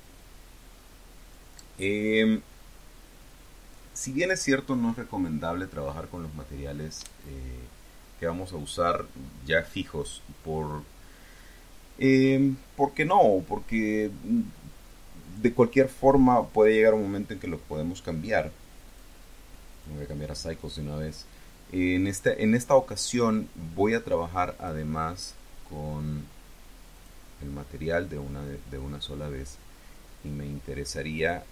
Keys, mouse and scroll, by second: 18.7 click, 19.5 click, 24.4 click, 26.8 click, 31.0 click.